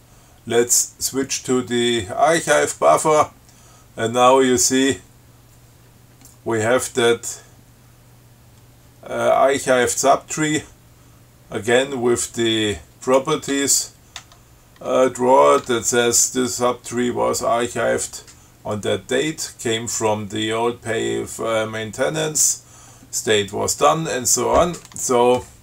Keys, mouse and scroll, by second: 2.6 click, 4.7 scroll down 2, 13.3 click, 13.8 Tab, 15.9 Tab.